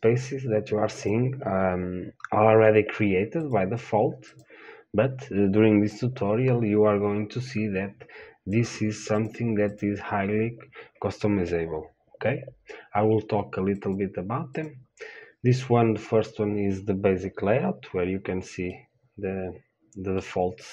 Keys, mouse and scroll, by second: 4.6-19.0 drag, 19.0-20.7 middle drag.